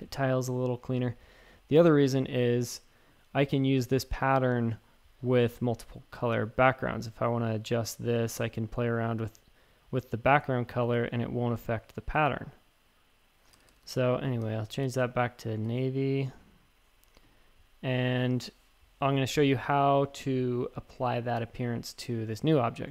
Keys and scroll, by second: 0.0-0.5 typing, 2.1-2.9 typing, 13.5 super+z, 13.7 super+z, 13.8 super+z.